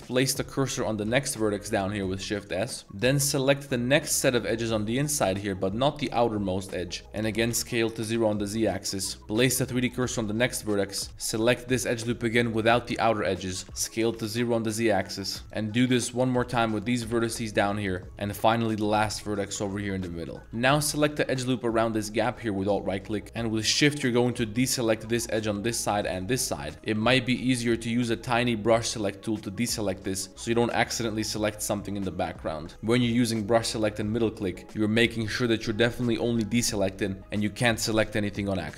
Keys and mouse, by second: 0.0 click, 0.3 middle drag, 0.7 shift+s, 2.1-2.6 middle drag, 2.8 z, 2.8 z, 3.2 middle click, 4.2 2, 4.4 click, 4.6 z, 6.8-9.2 typing, 8.5 click, 9.1 middle click, 9.4 middle click, 9.8 click, 10.2 shift+s, 10.6 middle click, 10.9 2, 11.1 ctrl+z, 11.3 ctrl+click, 11.7 shift+click, 12.4 shift+click, 12.9 z, 13.2 middle click, 13.5 s, 13.6 z, 14.1 0, 14.4 click, 14.7 middle click, 15.1 shift+middle click, 15.3 z, 15.4 click, 16.0 ctrl+click, 16.3-21.2 typing, 17.9 click, 18.5 click, 19.6 click, 20.3 middle click, 20.9 alt+click, 21.4 alt+click, 22.1 middle click, 22.5 z, 22.9 middle click, 23.2 z, 24.1 shift+click, 24.4 z, 25.1 shift+middle drag, 26.0 shift+click, 26.6 shift+middle click, 26.7 ctrl+z, 26.9 c, 29.8 right click, 30.1 shift+middle drag, 30.5 shift+right click, 31.1 shift+right click, 31.8 shift+right click, 32.1 middle click, 32.6 ctrl+z, 32.9 c.